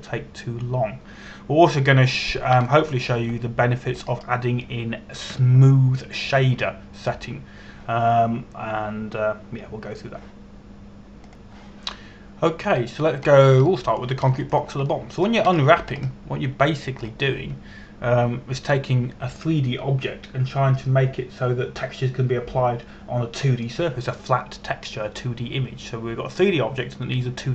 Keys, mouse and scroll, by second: 4.2 shift+Num_Lock, 4.3 shift+middle click, 5.6 scroll up 1, 12.9 click, 14.9 scroll down 1, 15.3 shift+middle click, 16.0 shift+middle click, 16.5 shift+middle click, 17.2-17.5 scroll up 1, 17.8-18.5 scroll up 1, 18.5-22.6 scroll down 1.